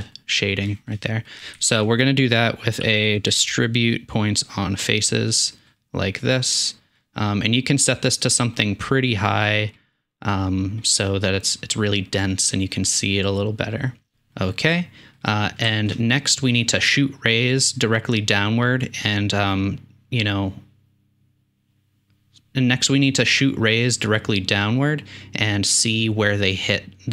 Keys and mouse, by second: 0.7 shift+middle click, 1.3 click, 1.4 shift+middle click, 1.6 shift+a, 6.3-7.6 drag, 15.2 click, 19.8-21.9 drag.